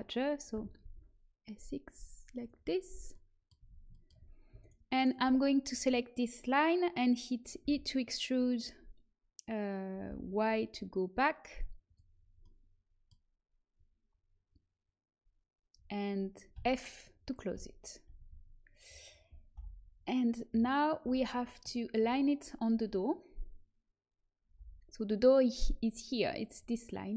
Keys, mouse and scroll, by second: 0.4 s, 2.7 middle click, 3.5 a, 4.5-6.7 right drag, 7.6 e, 12.1-16.5 middle drag, 16.5 f, 18.1 a, 19.5 l, 20.4 KP_3, 20.9 z, 24.5 l.